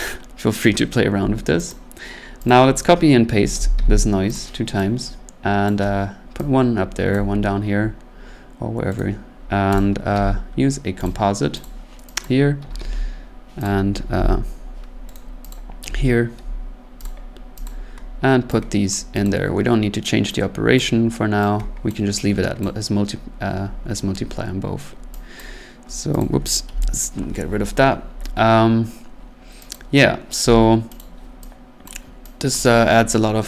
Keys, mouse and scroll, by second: 1.7 click, 2.5 click, 3.3 ctrl+c, 3.5 ctrl+v, 3.7 ctrl+v, 4.3 click, 5.7 click, 7.1 click, 9.0 right click, 9.7 click, 10.1 c, 11.0 click, 11.6 click, 12.2 click, 12.6 ctrl+c, 12.8 ctrl+v, 13.6 click, 14.2 End, 15.1 right click, 15.5 click, 15.8 c, 17.0 click, 17.6 click, 18.9 click, 19.2 click, 20.7 click, 21.9 click, 22.6 click, 25.4 click, 26.2 click, 26.7 Delete, 29.7 click, 31.0 click, 31.8 click, 32.5 click.